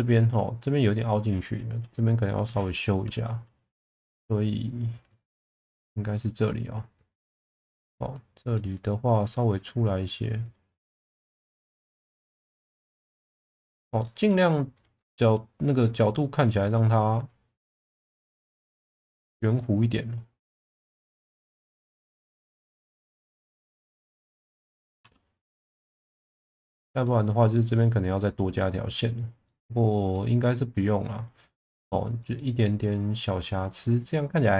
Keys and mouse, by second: 3.0 Tab, 4.7 click, 6.3-7.4 middle drag, 7.6 middle click, 9.4 click, 10.8 middle click, 14.0 middle click, 14.7 click, 15.0 Tab, 16.0 Tab, 18.5 click, 19.0 click, 22.5 middle click, 24.1 middle click, 25.0 Tab, 25.7 Tab, 26.6 middle click, 27.8 middle click, 28.6 middle click, 29.5 middle click, 30.8 click, 31.5 middle click, 32.2 Tab, 32.2 middle click, 33.7 click.